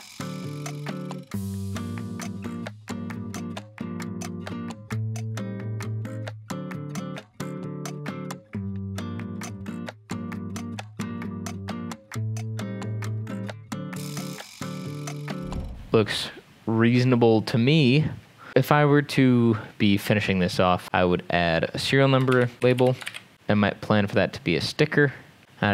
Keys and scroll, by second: 0.6 x, 1.4 ctrl+z, 1.9 n, 2.1 n, 2.5 Escape, 2.7 Delete, 2.8 x, 3.1 ctrl+z, 4.1 ctrl+s, 4.1 Escape, 4.1 m, 5.7-8.9 typing, 6.9 Escape, 7.0 ctrl+s, 8.3 Escape, 8.4 ctrl+z, 8.8 Escape, 9.3 ctrl+s, 11.4 Escape, 12.9 Escape, 12.9 b, 13.1 Escape, 13.7 ctrl+s, 14.9 Escape, 15.0 ctrl+s, 15.1 b, 16.2 ctrl+s, 16.2 v, 22.1-23.6 typing, 25.4 ctrl+d, 25.4-25.7 typing.